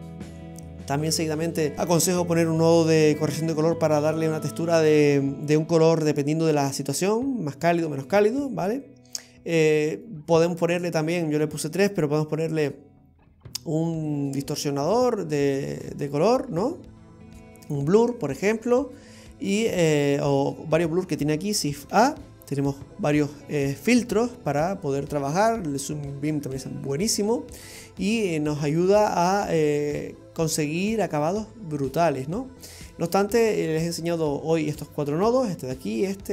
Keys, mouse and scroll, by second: 0.0 middle click, 9.1-9.7 scroll up 4, 10.0 middle click, 18.6 scroll down 2, 19.5-19.9 scroll down 2, 19.9 middle click, 22.0 shift+a, 29.3-31.4 scroll down 2, 31.4 scroll down 2, 32.2-34.4 scroll down 2, 34.4-36.3 scroll down 2.